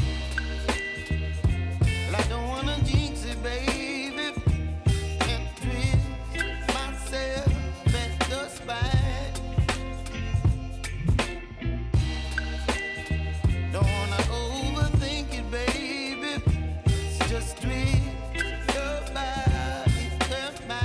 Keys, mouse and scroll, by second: 2.1-2.6 alt+scroll up 1, 4.0-7.9 drag, 7.9 s, 10.6 click, 13.6 Return, 14.6 click, 15.7 typing, 17.5-20.8 drag.